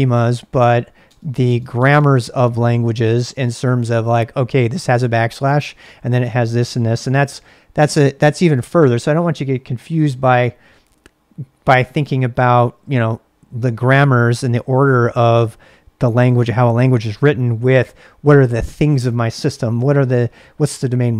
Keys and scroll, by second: 0.6 Tab, 0.9-3.3 typing, 9.6 ctrl+a, 9.8 ctrl+a.